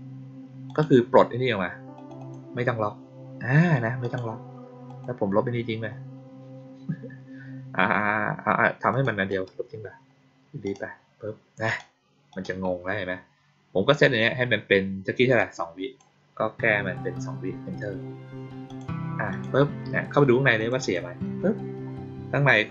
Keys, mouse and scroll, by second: 0.6 click, 1.9 click, 2.1 click, 3.9 click, 4.8 click, 8.8 click, 9.2 right click, 10.6 click, 11.6 click, 12.2 click, 15.3 click, 18.6 click, 19.2 click, 20.5 click, 20.7 click.